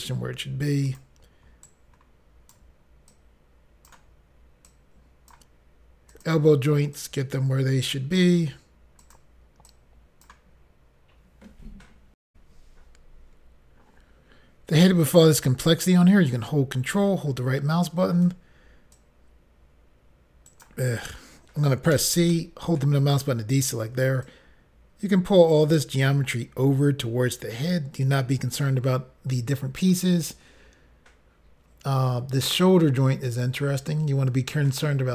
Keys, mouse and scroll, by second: 0.9 click, 1.0 click, 1.7 ctrl+right click, 3.1 click, 4.7 click, 6.2 click, 6.3 click, 7.0 click, 9.1 click, 9.2 click, 9.7 click, 12.3 Pause, 16.3 ctrl+right click, 18.9 click, 20.5 right click, 20.6 click, 21.9 c, 22.3 middle click, 23.1 right click, 24.2 click, 33.8 click, 33.9 click, 34.7 ctrl+right click.